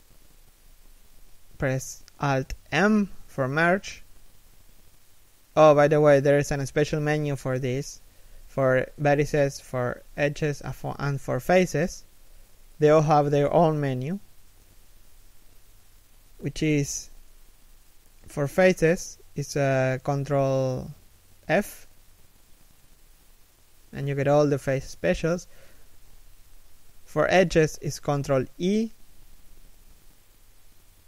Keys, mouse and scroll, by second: 1.8 alt+m, 4.9 ctrl+f, 6.5 ctrl+v, 9.2 shift+middle click, 11.1 z, 11.6 middle click, 21.2 ctrl+f, 27.9 ctrl+e.